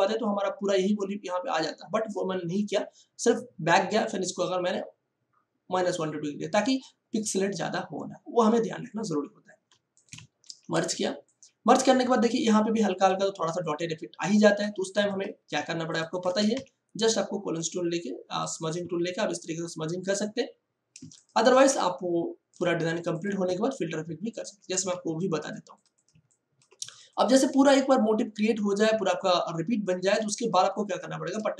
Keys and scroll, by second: 10.4 ctrl+e, 10.7 ctrl+space, 16.5 j, 20.9 space.